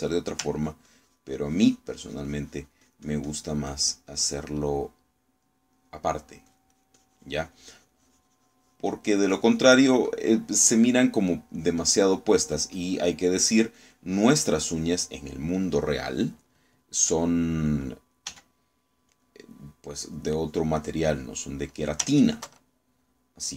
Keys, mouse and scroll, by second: 0.0 ctrl+click, 1.6-5.4 ctrl+drag, 5.5-7.2 ctrl+middle drag, 7.3-10.8 drag, 11.9 middle click, 12.6-16.1 drag, 19.4 f, 20.2 click, 21.2-22.5 drag, 23.4 ctrl+click.